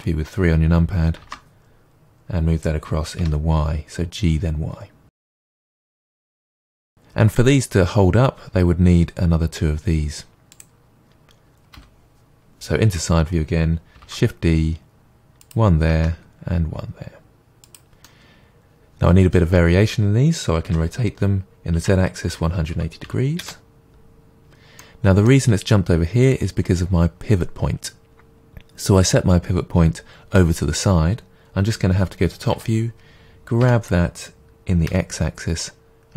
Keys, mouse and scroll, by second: 1.2 shift+d, 5.1 click, 5.4 g, 6.0 click, 6.3-10.5 middle drag, 10.5 click, 11.7 KP_1, 12.5 KP_3, 14.0 shift+d, 15.5 click, 15.9 shift+d, 17.7 click, 18.0-20.7 middle drag, 20.7 r, 23.5 Return, 24.8 middle click, 32.5 KP_7, 33.6 g.